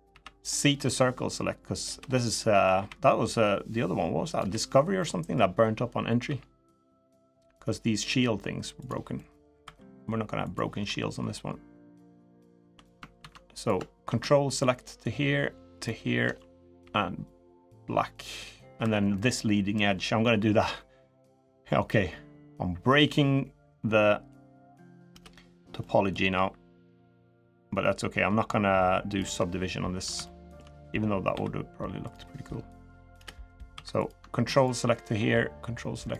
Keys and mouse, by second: 2.1 middle click, 2.5 c, 4.7 middle click, 6.0 g, 7.9 g, 8.9 middle click, 9.4 3, 10.2 click, 12.9 ctrl+z, 13.3 click, 14.3 ctrl+click, 15.5 ctrl+click, 16.6 g, 17.7 middle click, 18.5 3, 18.9 middle click, 20.3 k, 25.5 middle click, 26.1 k, 30.0 shift+middle click, 31.1 k, 33.5 3.